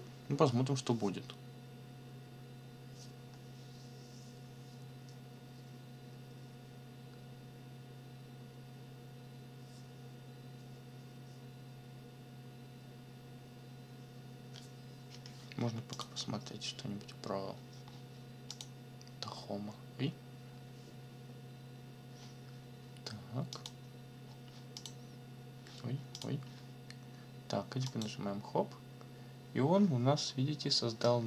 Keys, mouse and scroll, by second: 15.9 click, 18.5 click, 23.5 click, 24.8 click, 26.1 click, 27.9 click, 31.0-31.2 drag.